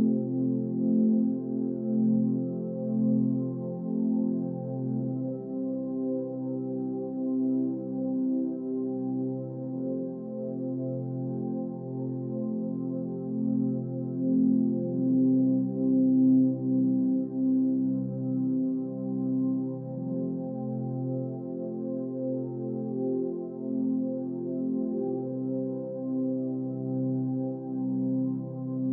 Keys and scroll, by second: 17.2 Delete, 17.8 Down, 18.6 Left, 21.7 Up, 23.0 Right, 23.2 Down, 23.7 Right, 23.8 Up, 24.1 Left, 24.9 Up, 25.0 Right, 25.1 Up, 25.1 Right, 25.3 Up, 25.5 Right, 27.2 Left.